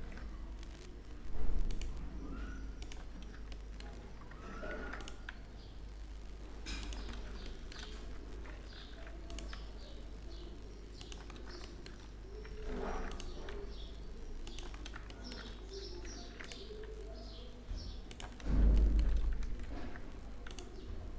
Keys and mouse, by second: 0.0 ctrl+r, 4.2 ctrl+r, 8.4 ctrl+r, 12.4 ctrl+r, 14.4 click, 15.8 ctrl+r, 19.3 ctrl+r.